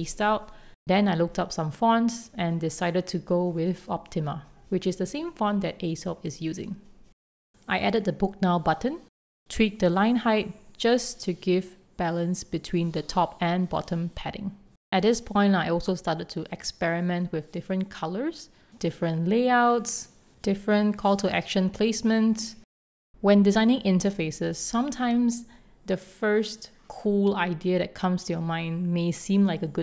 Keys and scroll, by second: 0.8 shift+super+., 1.8 super+z, 2.6 super+z, 4.9 super+0, 8.1 6, 8.3 Return, 10.0 Up, 10.8 alt+Down, 10.8 alt+Up, 11.4 alt+Up, 12.2 Return, 14.1 Return, 14.8 shift+super+., 16.3 super+s, 16.8 alt+super+c, 17.2 super+., 17.6 Return, 18.7 super+z, 19.7 super+z, 27.3 alt+Up, 27.9 super+s, 28.6 alt+Down, 28.9 super+s.